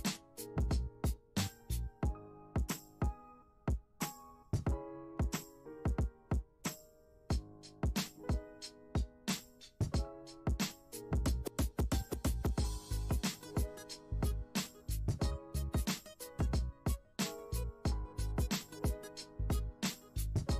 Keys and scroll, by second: 14.1 ctrl+z, 15.0 ctrl+z, 20.4 F1.